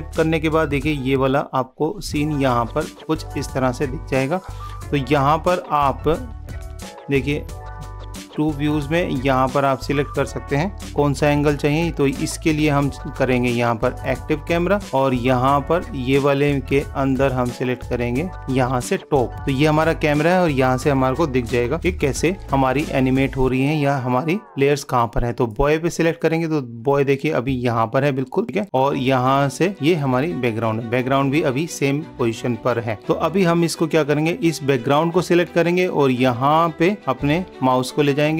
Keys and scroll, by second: 10.8 super+-, 22.4 super+=, 33.0 super+-.